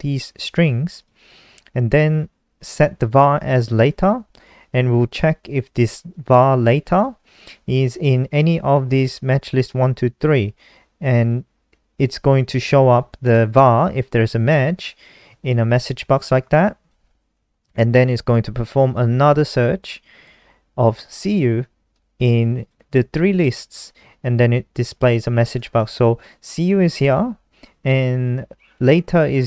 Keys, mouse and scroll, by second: 1.4 click, 2.9 click, 6.5 click, 9.5 click, 16.6 click, 19.9 click, 27.4 click.